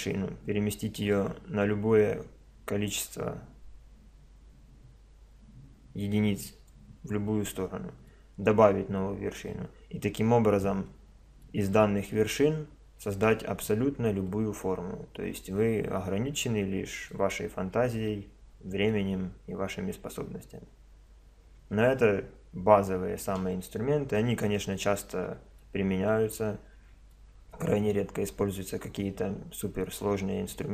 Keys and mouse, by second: 1.1-2.9 drag, 7.3-12.9 middle drag, 13.7-16.3 middle drag, 17.1-19.1 middle drag, 19.3-21.2 middle drag.